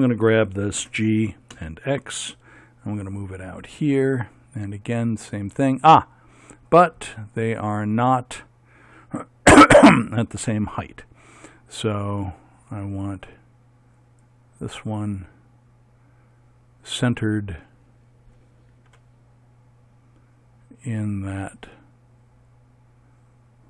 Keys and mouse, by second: 0.8 g, 14.0-18.9 right drag, 18.9 g.